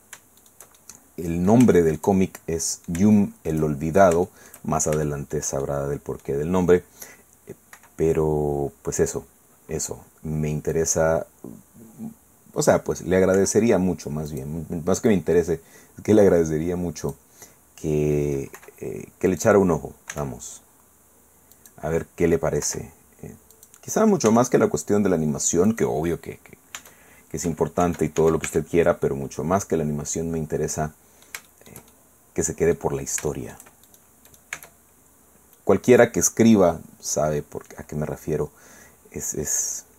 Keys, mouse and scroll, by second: 0.4 shift+middle click, 0.8-3.7 shift+middle drag, 4.3 shift+middle click, 5.0 shift+middle click, 6.0 click, 7.7 i, 9.0 click, 10.7-12.9 drag, 13.3 i, 14.3 click, 15.1-17.3 drag, 18.5 i, 19.3 click, 20.1 e, 21.5 click, 22.6 i, 23.5 click, 24.3 e, 25.7 click, 26.0-26.7 scroll down 1, 26.8 Caps_Lock, 27.8 Caps_Lock, 28.5 Tab, 29.0-32.9 middle drag, 33.0-33.3 scroll up 1, 33.3 shift+middle click, 33.9 shift+click, 34.2 shift+middle click, 34.5 shift+Tab.